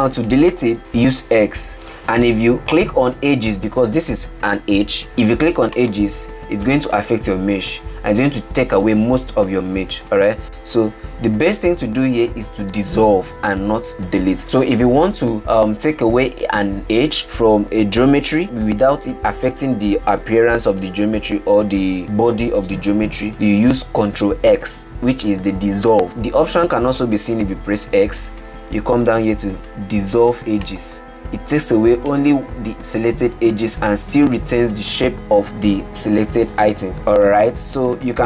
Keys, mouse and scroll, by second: 1.6 x, 7.2-10.3 middle drag, 11.8 ctrl+z, 28.3 x, 32.7-35.4 middle drag, 38.1 ctrl+z.